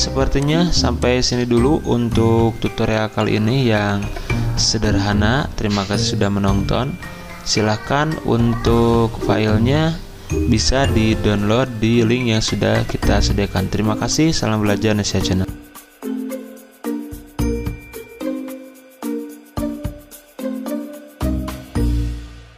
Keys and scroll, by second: 0.2 z.